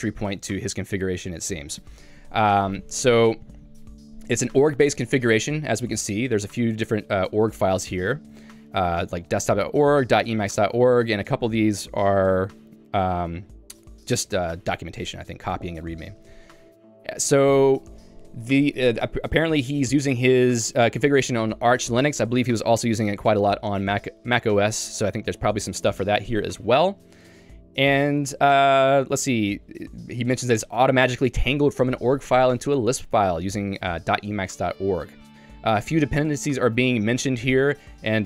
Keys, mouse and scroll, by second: 0.1 j, 6.7 super+w, 7.5 Escape, 7.9 super+e, 9.1-11.5 typing, 13.0 j, 14.0 k, 14.2 k, 16.2 q, 17.7 j, 29.1 k, 30.1 j.